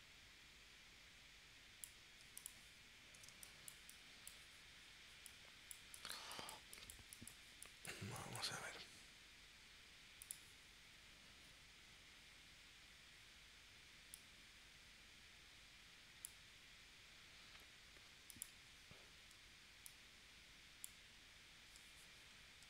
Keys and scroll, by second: 3.3 space.